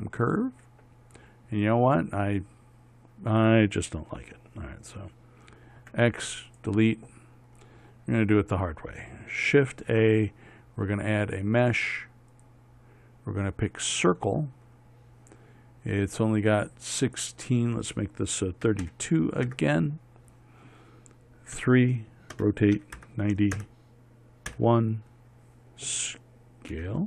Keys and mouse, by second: 2.7 middle click, 3.2-6.3 middle drag, 6.3 x, 10.2 shift+a, 22.1 KP_3, 22.8 r, 25.0 KP_1.